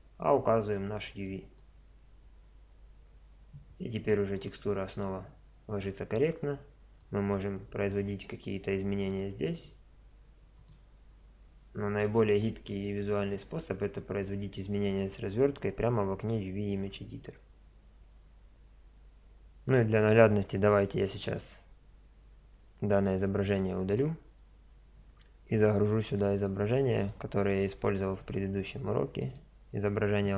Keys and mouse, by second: 1.6 middle click, 12.0-12.5 middle drag, 29.3 right click, 29.5-30.3 middle drag.